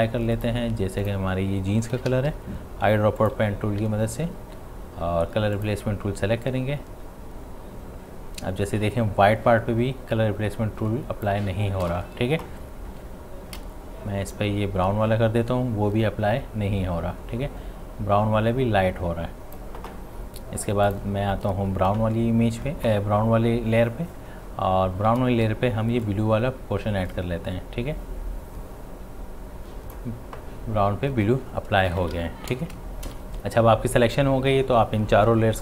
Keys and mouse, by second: 3.2 click, 3.8 v, 5.6-11.8 drag, 11.8 ctrl+z, 13.5 x, 14.4-20.9 drag, 25.3 x, 26.1-31.8 drag, 31.8 ctrl+d, 32.0 v, 33.1 typing.